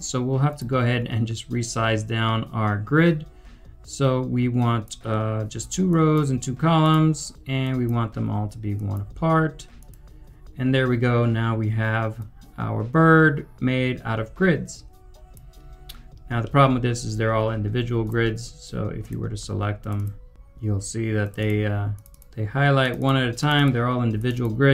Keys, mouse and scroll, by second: 10.0 typing, 15.7 scroll up 1, 16.4 middle click, 19.9 middle click, 20.3 double click, 21.3 double click.